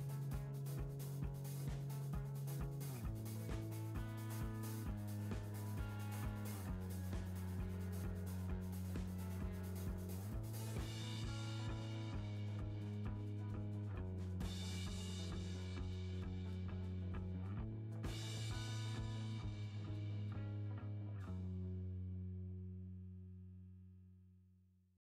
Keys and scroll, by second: 8.5 Down.